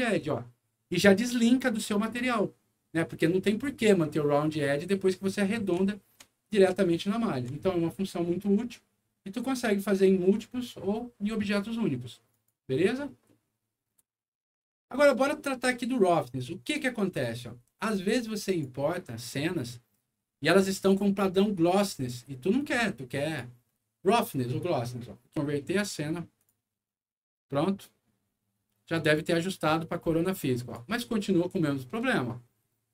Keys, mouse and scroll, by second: 0.4 alt+middle click, 1.2 middle click, 4.1 click, 5.1 middle click, 5.6 middle click, 5.9 alt+middle click, 6.4 alt+middle click, 7.0 alt+middle click, 9.6-10.6 alt+drag, 12.3 click, 13.2 middle click, 13.7 scroll down 1, 14.2 scroll up 1, 16.6 click, 18.4 click, 20.3 scroll up 2, 20.7 click, 22.5 click, 26.3 click, 29.0 click, 30.2 click, 31.3 middle click, 31.9 middle click, 32.4 middle click.